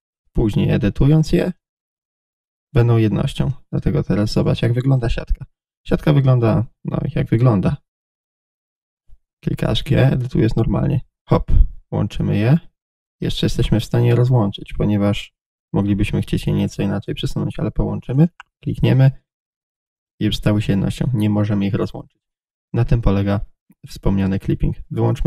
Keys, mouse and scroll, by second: 1.6 click, 1.7-5.0 middle drag, 5.0 click, 5.2-18.3 middle drag, 9.3 g, 18.3 click, 19.5-22.7 middle drag, 20.0 g, 22.7 click, 22.8-25.2 middle drag.